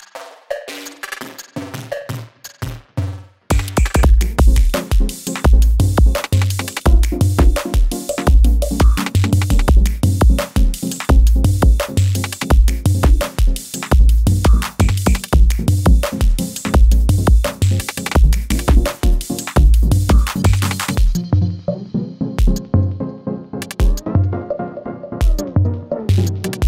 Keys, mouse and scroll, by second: 3.5 click, 9.1-11.9 drag, 23.4 space, 25.5-26.4 drag.